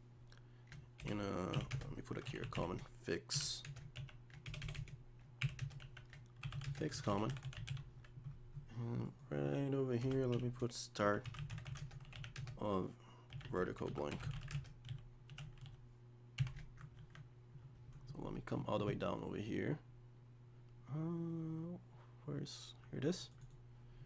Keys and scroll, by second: 17.0 ctrl+s.